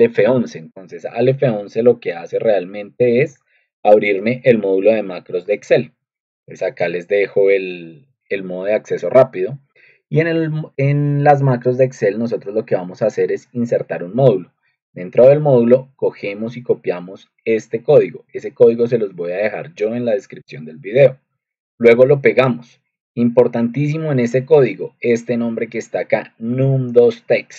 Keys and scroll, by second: 0.2 ctrl+2, 10.6 Escape, 26.4 ctrl+2.